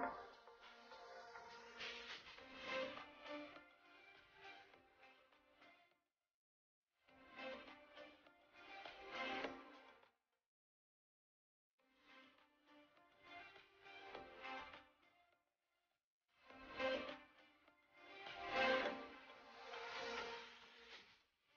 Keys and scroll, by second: 3.9 ctrl+shift+], 10.7 shift+space, 13.1 shift+space, 20.5 ctrl+shift+], 21.0 shift+space.